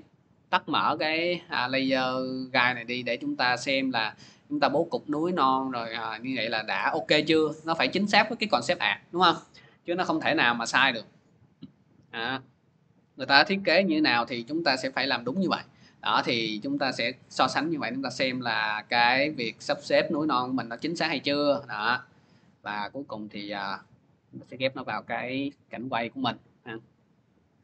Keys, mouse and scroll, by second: 4.4-9.5 drag, 19.8 click, 21.7 click, 23.1 click.